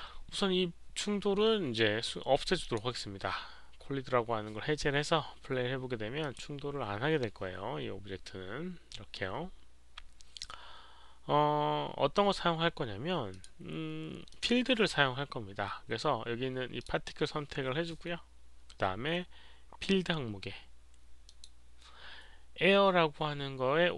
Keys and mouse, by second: 0.0 click, 2.6 click, 6.2 click, 8.6 click, 8.6 click, 13.3 click, 14.3 click, 16.7 click, 21.2 click.